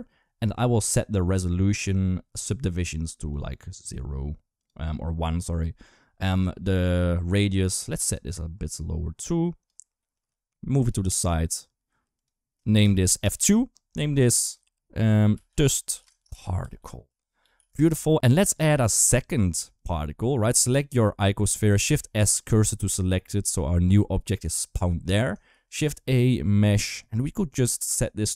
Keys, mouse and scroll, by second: 1.1 click, 3.1 click, 3.5 click, 4.3 click, 7.8-9.4 drag, 9.9 g, 13.0-14.4 middle drag, 13.0-14.4 scroll up 1, 14.4 shift+F2, 18.0 Delete, 19.5 click, 21.7 shift+s, 25.3 shift+a.